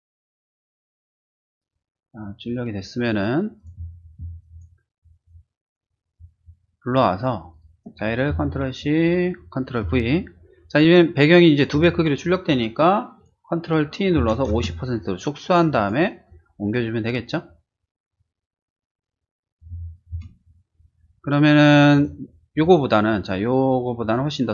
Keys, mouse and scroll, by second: 0.2 click, 0.6 click, 0.8 typing, 1.0 click, 3.6 click, 4.5 click, 6.1-6.4 drag, 7.5 click, 8.3 ctrl+c, 8.7 click, 10.0 ctrl+v, 13.0 ctrl+t, 13.2 click, 14.2 typing, 14.5 Return, 15.6 click, 16.3-19.6 drag, 20.1 Return, 21.9 click, 22.5 click, 24.0 click.